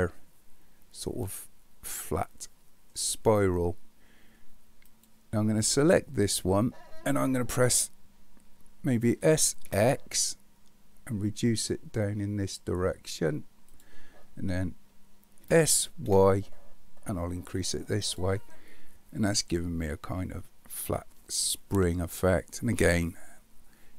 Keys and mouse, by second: 9.2 s, 15.4 s, 18.7-22.2 middle drag.